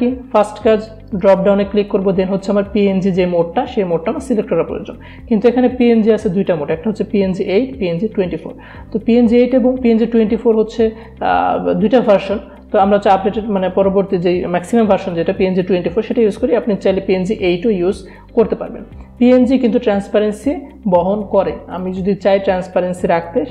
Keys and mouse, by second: 1.1 click, 16.2 click, 16.3 click, 21.9 click.